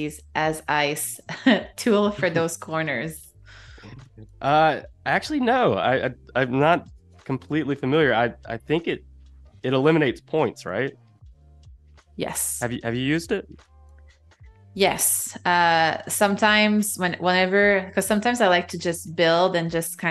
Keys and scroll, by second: 3.6 -, 6.8 shift+c, 11.4 -, 14.9 shift+c, 17.8 space.